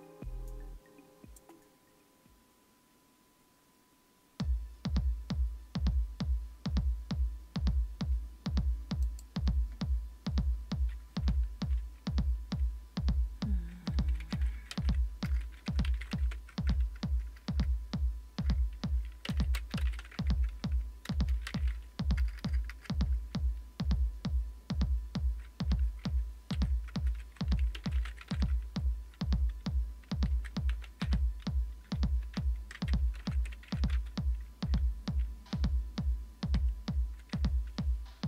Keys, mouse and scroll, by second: 0.1-0.6 scroll down 1, 3.7-4.4 scroll up 1, 4.4-5.6 scroll up 1, 5.6-9.0 scroll up 1, 9.0 click, 15.9-22.7 typing, 16.3 Tab, 27.7-28.8 typing, 30.1-34.4 typing, 37.3-38.0 typing.